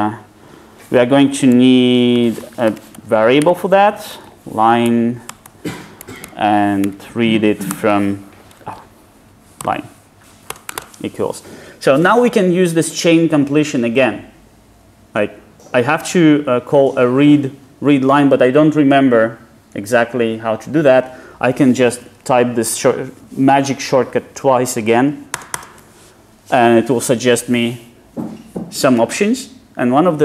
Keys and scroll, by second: 7.8 Return, 8.6 super+z, 25.3 ctrl+shift+space.